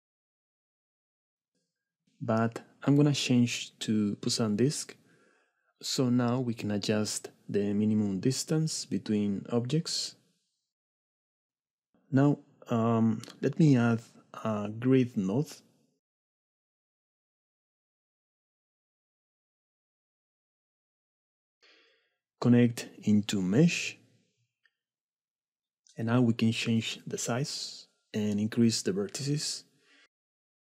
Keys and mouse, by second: 0.6 shift+click, 1.0 click, 3.1-4.0 drag, 6.7-11.6 shift+drag, 14.3-15.5 drag, 16.6 shift+a, 21.3 middle click, 22.0-23.1 drag, 26.2-27.3 drag, 27.8 shift+click, 28.2 shift+middle click, 29.0 shift+middle click.